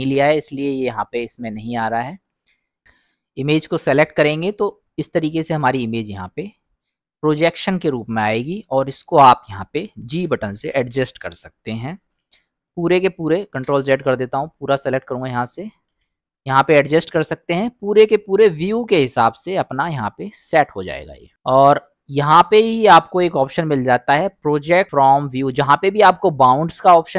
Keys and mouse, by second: 2.6 click, 4.0 middle click, 5.3-8.2 middle drag, 8.6 click, 10.1 g, 13.5 ctrl+z, 14.6 click, 15.9 g, 22.6 u.